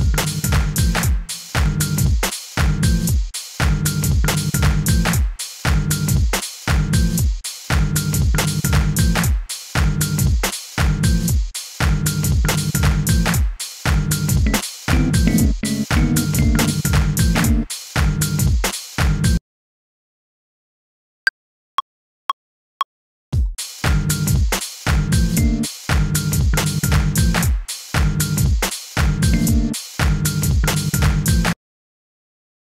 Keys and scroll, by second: 1.5 super+z, 6.1 super+r, 7.2 shift+Right, 7.5 BackSpace, 8.5 2, 9.9 super+r, 10.2 super+Right, 10.7 BackSpace, 10.7 2, 12.0 super+r, 12.3 super+Right, 12.8-16.0 typing, 13.2 Return, 20.3 BackSpace, 25.3 g, 29.3 g, 31.5 space.